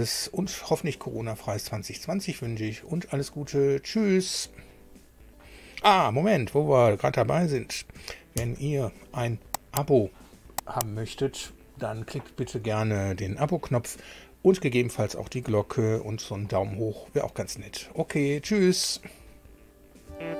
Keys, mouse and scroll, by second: 8.3 super+u.